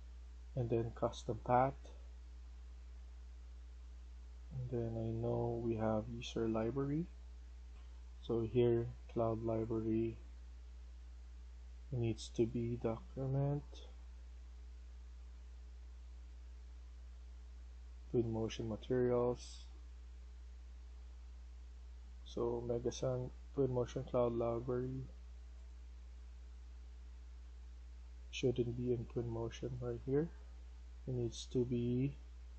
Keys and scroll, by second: 7.6 F1, 21.0 Escape.